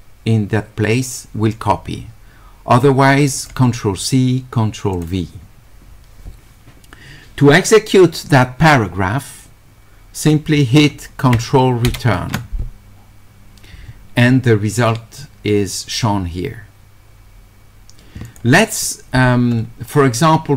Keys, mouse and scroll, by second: 3.4 click, 4.9 click, 18.3 click.